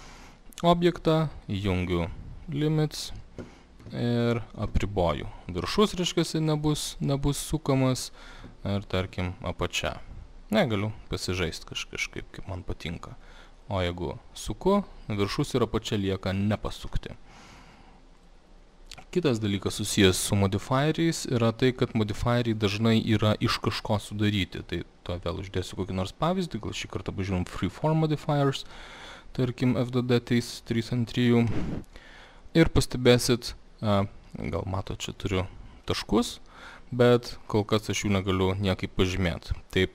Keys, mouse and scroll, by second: 0.3 click, 1.5 click, 5.8 click, 12.2 click, 14.7 click, 16.9 click, 18.3 click, 24.8 click, 31.6 click, 34.9 alt+middle click, 37.3 click, 37.7 click.